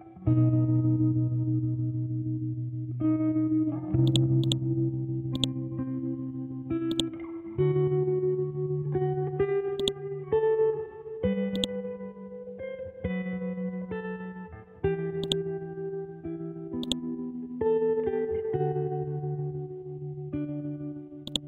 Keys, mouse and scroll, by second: 2.0 p, 4.0 click, 9.7 click, 15.4-21.2 drag.